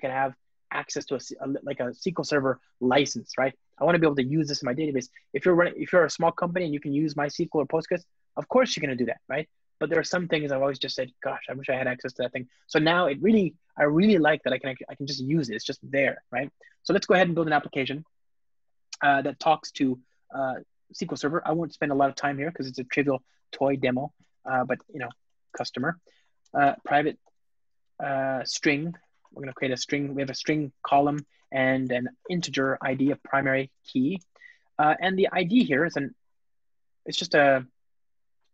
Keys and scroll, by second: 24.1 Return, 27.6 alt+BackSpace, 28.5 alt+BackSpace, 31.7 Return, 32.4 Return.